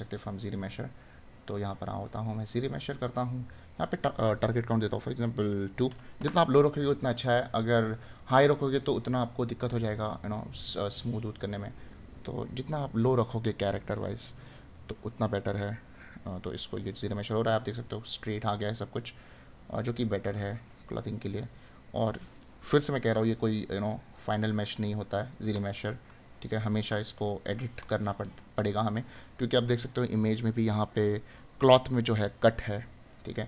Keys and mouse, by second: 17.7 right click, 19.4 right click, 25.6 right click.